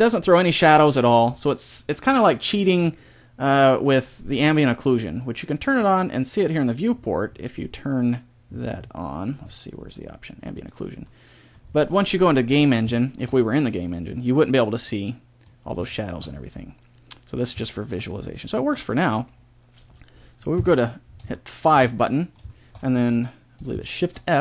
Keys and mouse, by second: 6.2-7.6 drag, 7.6-10.5 middle drag, 10.5 click, 11.0 middle click, 15.0 middle click, 16.2-17.4 middle drag, 20.6 KP_5, 24.0 shift+f.